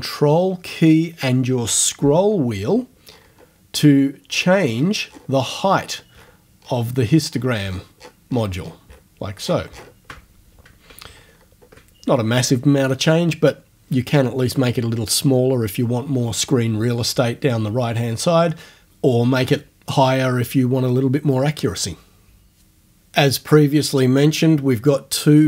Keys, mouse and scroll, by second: 3.1-3.6 ctrl+scroll up 2, 3.9-5.7 ctrl+scroll down 4, 5.7-6.5 ctrl+scroll up 2, 6.9 ctrl+scroll up 1, 7.2-8.3 ctrl+scroll down 2, 9.4-10.1 ctrl+scroll down 2, 11.1-11.6 ctrl+scroll up 2.